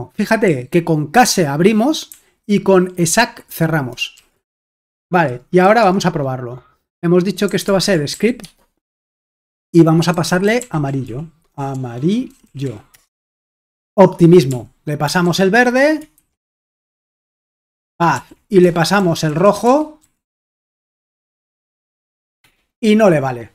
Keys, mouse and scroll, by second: 0.0-4.7 typing, 4.8 Return, 7.2-8.6 typing, 9.8-13.1 typing, 14.5 typing, 15.3 ctrl+p, 16.2-20.0 typing, 18.2 ctrl+p.